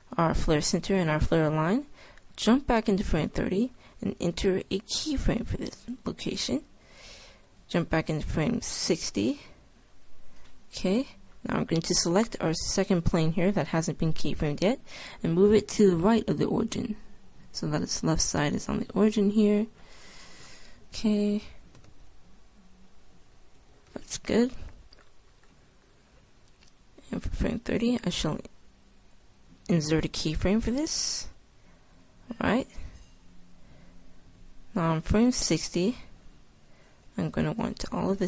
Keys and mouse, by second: 2.8 click, 4.7 i, 11.2-13.0 right drag, 14.5-16.2 drag, 22.1-23.9 middle drag, 22.1 g, 24.0-25.4 drag, 26.4-27.5 middle drag, 27.5-29.2 drag, 29.9 i, 32.3-34.0 drag, 37.8-38.2 drag.